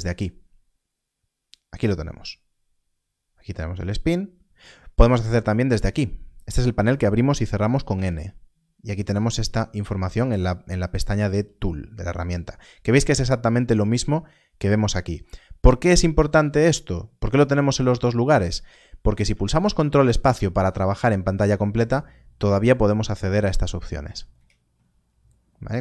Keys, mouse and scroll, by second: 5.7 click, 7.5 n, 7.8 n, 19.2 n, 19.7 ctrl+space, 23.7 ctrl+space.